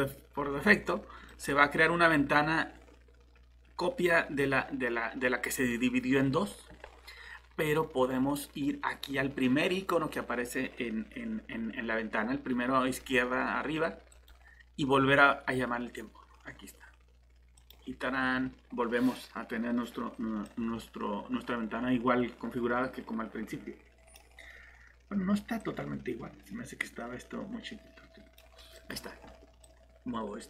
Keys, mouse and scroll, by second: 20.8 click, 21.0 alt+Tab, 29.8 alt+Tab, 29.8 click.